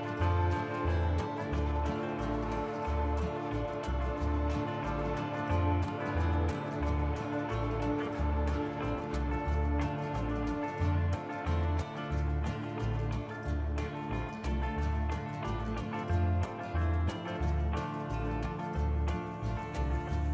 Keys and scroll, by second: 8.3 ctrl+z, 9.9 ctrl+z, 16.0 ctrl+b.